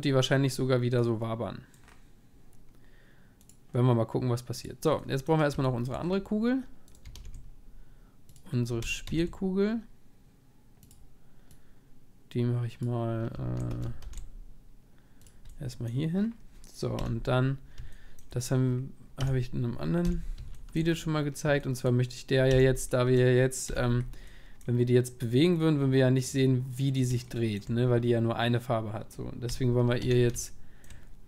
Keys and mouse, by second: 1.4-4.5 middle drag, 3.4-6.8 drag, 6.8-8.4 middle drag, 6.9-8.8 right drag, 7.1 shift+s, 9.0 shift+a, 12.0-13.7 drag, 13.7 g, 17.0-21.1 middle drag, 17.0 KP_1, 19.2 Tab, 20.0 z, 22.5 Tab, 23.2-26.9 middle drag, 23.7 z, 25.5-28.0 drag, 28.0-30.0 middle drag, 29.5 KP_1, 30.0 Tab, 30.5 middle click.